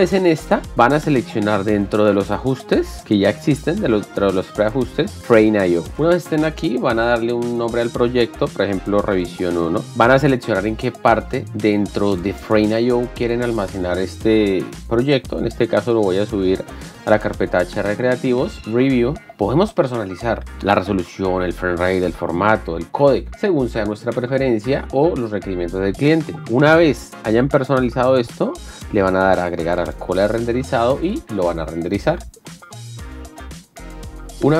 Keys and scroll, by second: 6.5 BackSpace, 8.7-10.4 typing.